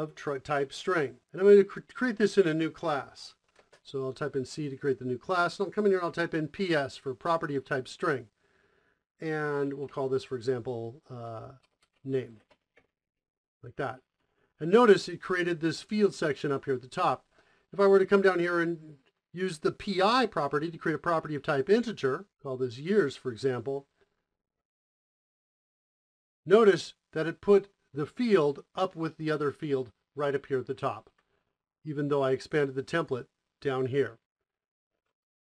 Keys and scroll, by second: 2.8 Return, 2.9 c, 3.4 space, 4.1 Return, 4.3 Return, 5.7-7.3 typing, 9.0-12.5 typing, 12.9 Down, 13.1 Down, 13.5 Up, 13.7 Up, 13.9-14.6 Up, 14.7 Up, 15.2 Down, 15.3 Up, 15.6 End, 16.1 Down, 16.3-17.1 Down, 17.3 Up, 17.7 Down, 19.4-20.4 typing, 21.4-23.2 typing, 24.9 Return, 28.7 typing, 30.2 Return, 34.7 ctrl+shift+space.